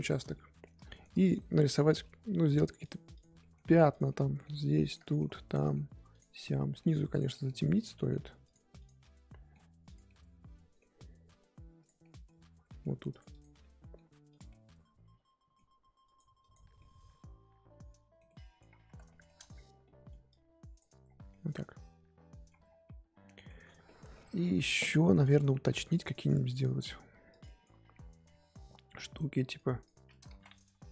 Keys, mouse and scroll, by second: 2.5 f, 3.1 click, 3.4 middle click, 3.9 click, 4.0 middle click, 4.8 click, 5.0-6.1 shift+middle drag, 6.1 click, 6.3 middle click, 7.1 click, 7.3 middle click, 7.7 click, 7.9 middle click, 8.4 click, 9.0 middle click, 9.8 click, 10.0-11.8 middle drag, 11.8 click, 12.0-13.1 middle drag, 13.1 click, 13.6 middle click, 14.3 click, 14.5-16.0 middle drag, 16.0 click, 16.8-18.7 middle drag, 18.7-19.0 scroll up 2, 19.1 shift+middle click, 19.3-19.8 scroll up 4, 19.8 middle click, 20.3 click, 21.0 scroll down 5, 21.3-22.5 middle drag, 22.5 scroll up 1, 22.6 scroll down 1, 22.8-25.2 middle drag, 25.2 click, 25.5 middle click, 25.7 scroll up 1, 25.9 middle click, 26.5 f, 27.4-29.5 middle drag, 29.5 click, 30.3 ctrl+z, 30.7 f.